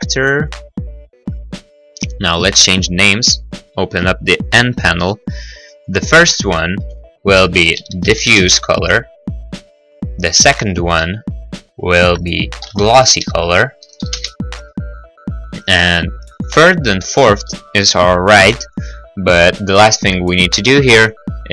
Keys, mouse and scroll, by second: 0.5 click, 1.2 n, 4.9 click, 5.8 click, 6.0 click, 6.7 Left, 7.5-8.3 typing, 8.3 Return, 9.5 click, 9.7 click, 10.6 click, 10.8 click, 11.3 Left, 12.8-14.0 typing, 14.2 Return, 16.4 click, 16.5 click, 16.8 click, 16.9 click, 17.5 middle click, 19.8 scroll, 20.3 click, 21.0 click.